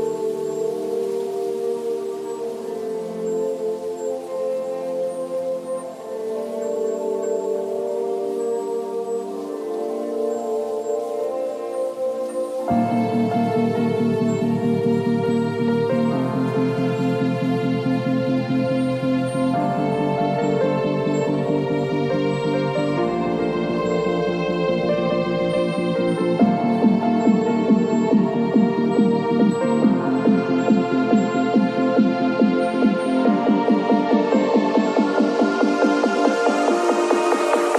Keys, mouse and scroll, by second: 29.9 shift+click, 30.4 s.